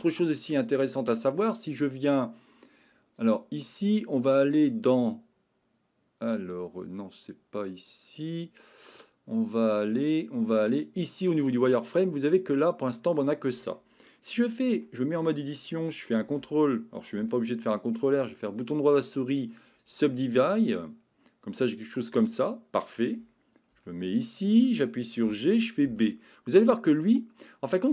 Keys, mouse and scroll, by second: 0.1-0.5 shift+middle drag, 3.3-11.7 drag, 12.5-13.8 middle drag, 14.7 Tab, 16.3 ctrl+r, 18.0-19.8 right drag, 20.8-23.2 middle drag, 23.7 Tab, 24.4 middle click, 25.2 g.